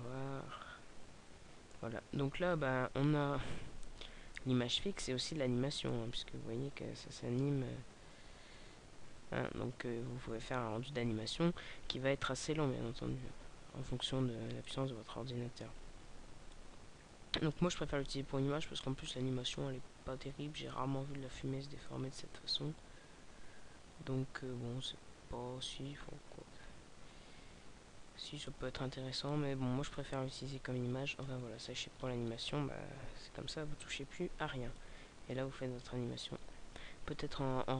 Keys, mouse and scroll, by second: 4.5 Escape, 6.1 click, 13.1-14.2 scroll down 2, 14.9 click, 26.0-27.8 scroll down 3, 28.0 alt+a, 30.1 click, 31.6-32.6 scroll up 6.